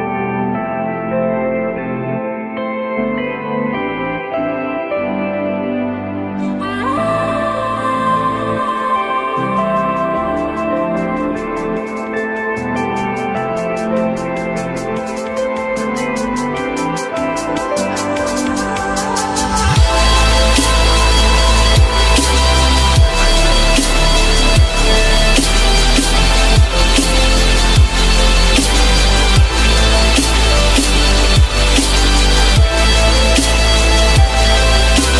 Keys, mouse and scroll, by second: 1.8 F4, 2.3 F3, 3.1 alt+middle click, 4.4 F4, 5.3 alt+middle click, 6.6 alt+middle click, 8.6 alt+middle click, 10.0 alt+middle click, 10.8 alt+middle click, 11.0-11.6 alt+scroll up 1, 12.2 z, 13.3 alt+middle click, 14.5 alt+middle click, 16.8 ctrl+z, 18.8 z, 20.0 F3, 27.3 F3, 28.2 alt+middle click, 29.2-29.6 alt+scroll up 1, 31.1 z.